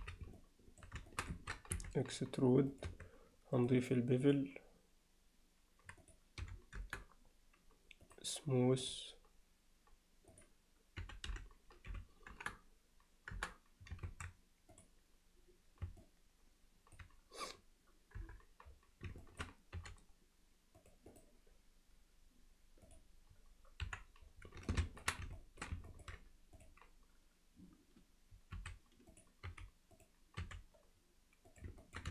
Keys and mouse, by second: 0.0 z, 0.4-0.8 alt+middle drag, 1.1 ctrl+shift+middle click, 1.8 e, 2.9 Tab, 3.7-4.4 drag, 6.0-7.2 drag, 10.3-13.5 drag, 14.1 ctrl+a, 16.0-17.0 middle drag, 18.2 KP_7, 19.2 alt+shift+middle click, 19.8 g, 21.3-23.0 right drag, 23.8 KP_1, 24.7 alt+shift+click, 25.4 alt+shift+middle click, 25.9 ctrl+middle click, 26.6 drag, 28.6 s, 29.5 g, 30.4 r, 31.8 ctrl+alt+middle click.